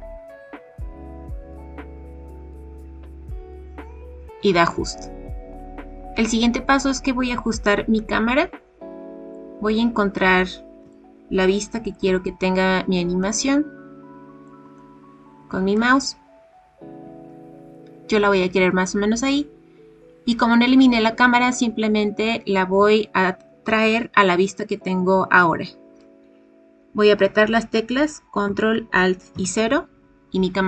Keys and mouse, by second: 5.6 click, 7.9-9.3 middle drag, 10.9-11.9 shift+middle drag, 13.2-14.4 middle drag, 14.7-15.7 shift+middle drag, 29.3 ctrl+alt+KP_0.